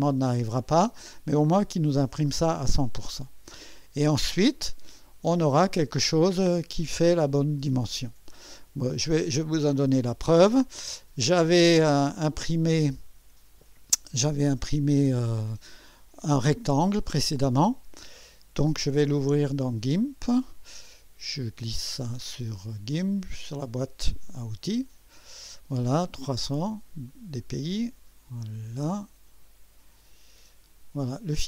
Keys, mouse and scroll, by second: 20.9 click, 21.4-22.9 drag, 22.9-24.7 drag, 27.1 click.